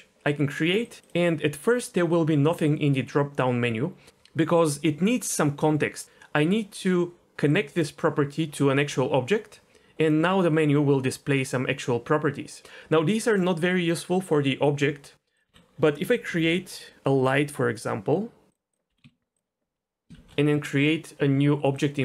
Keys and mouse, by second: 0.8 click, 1.7-3.9 drag, 7.7-8.8 drag, 10.1-12.7 drag, 13.4-14.1 drag, 15.5 x, 18.7 shift+a, 18.9 g, 19.0 z, 20.1 shift+a.